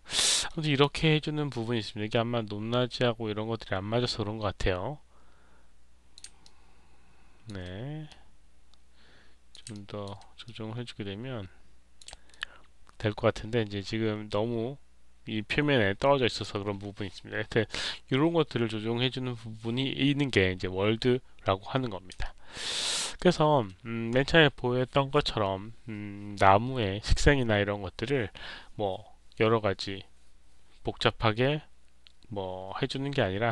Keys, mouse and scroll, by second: 0.2 alt+middle click, 0.5 alt+click, 1.4-6.1 drag, 6.7 alt+click, 8.0-9.4 drag, 9.6 alt+click, 10.3-11.9 drag, 13.0-16.3 alt+drag, 21.0 middle click, 21.0-21.6 scroll down 1, 22.1 alt+click, 22.6 alt+right click, 23.1 alt+middle click.